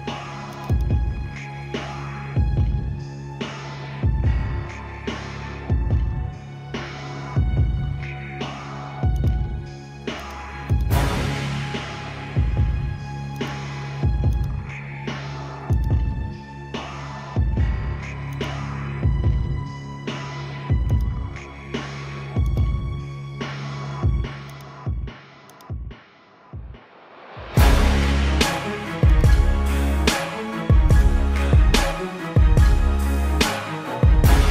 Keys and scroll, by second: 23.4 ctrl+=, 24.7 space, 26.5 ctrl+alt+z.